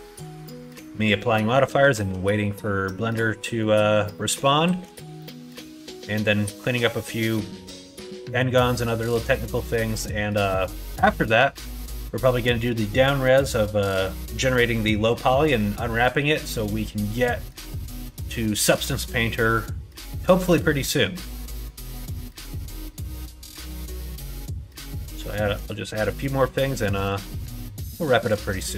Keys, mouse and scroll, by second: 1.1 middle click, 1.8 shift+middle click, 2.4 middle click, 2.8 middle click, 3.3 middle click, 4.0 middle click, 4.5 shift+middle click, 5.1 middle click, 5.9 middle click, 8.9 middle click, 9.8 middle click, 10.8 middle click, 11.7 middle click, 16.1 middle click, 17.2 middle click, 17.9 middle click, 21.0 middle click, 21.5 middle click, 22.2 middle click, 22.6 shift+middle click, 23.5 click, 23.8 middle click, 24.3 shift+middle click, 25.3 middle click, 25.6 shift+middle click, 26.3 shift+middle click, 26.6 shift+middle click, 27.0 middle click, 27.5 middle click.